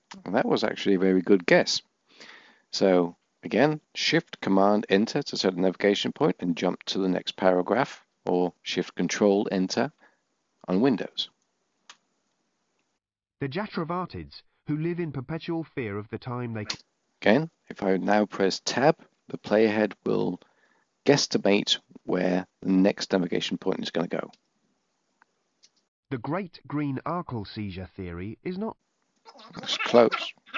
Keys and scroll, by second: 2.5 shift+super+Return, 8.2 ctrl+shift+Return, 19.9 Tab.